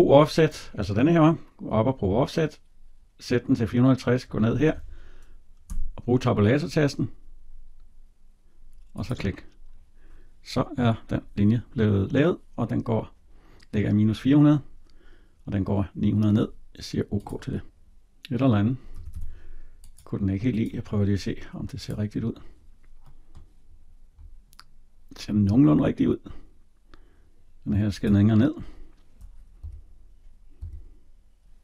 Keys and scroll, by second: 5.5 Tab, 18.7 Escape.